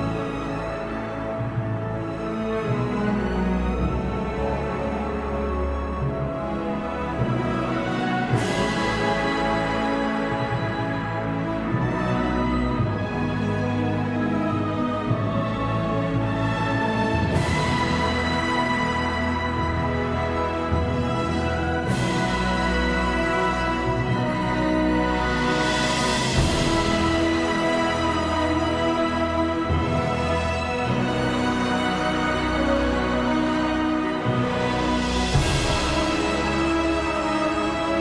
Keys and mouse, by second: 0.6 shift+middle click, 0.9 Tab, 1.0 Tab, 1.1 alt+shift+middle click, 1.3 Tab, 1.3 a, 1.5 shift+n, 1.7 Tab, 1.8 alt+middle click, 3.2 alt+middle click, 3.3 alt+shift+middle click, 3.5 alt+shift+middle drag, 3.7 alt+shift+middle click, 3.7 drag, 3.8 Tab, 3.9 drag, 5.2 shift+e, 5.6 click, 5.6 alt+shift+middle click, 5.9 click, 6.4 shift+middle click, 6.9 alt+shift+middle click, 7.2 click, 7.3 middle click, 7.6 alt+shift+middle click, 8.3 click, 8.6 shift+middle click, 8.9 alt+shift+middle click, 9.1 click, 9.3 click, 9.5 alt+middle click, 9.8 click, 10.1 click, 10.3 click, 10.6 click, 10.7 click, 11.2 click, 11.4 click, 11.8 click, 12.1 alt+shift+middle click, 12.3 click, 12.5 shift+drag, 12.6 shift+click, 13.1 ctrl+z, 13.6 shift+drag, 13.7 shift+drag, 13.9 shift+drag, 15.6 shift+middle click, 15.9 alt+middle drag, 16.2 drag, 16.5 shift+drag, 16.9 shift+e, 17.8 click, 18.5 alt+shift+middle click, 18.7 shift+middle click, 19.3 shift+click, 19.4 shift+click, 19.6 shift+click, 21.9 click, 22.6 click, 23.9 click, 24.3 shift+click, 26.6 alt+middle click, 26.7 Tab, 26.8 alt+shift+middle click, 28.7 alt+middle click, 29.8 alt+shift+middle click, 31.6 s, 31.7 alt+middle click, 32.1 Tab, 32.1 middle click, 32.3 alt+shift+middle click, 32.6 shift+middle drag, 32.8 middle click, 32.9 shift+middle drag, 33.2 Tab, 33.2 click, 34.2-35.4 drag, 35.5 click, 37.0 alt+shift+middle click, 37.1 alt+middle click.